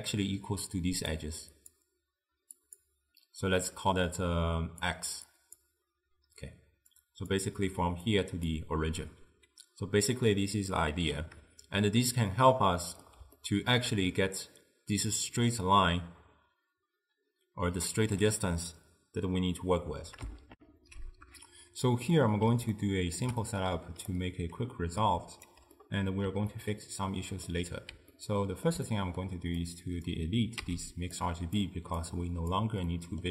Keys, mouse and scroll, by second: 0.0-9.8 typing, 1.3-1.8 drag, 4.9 drag, 5.4 click, 7.1 click, 8.2 click, 11.8-16.5 shift+middle drag, 20.6 ctrl+alt+shift+w, 22.2-23.8 middle drag, 23.8 d, 24.2-25.6 right drag, 25.6 d, 25.8 d, 25.8-27.5 middle drag, 28.2-29.7 ctrl+middle drag, 29.7 click, 30.7 x, 31.2 click, 32.1 click, 32.9-33.3 middle drag.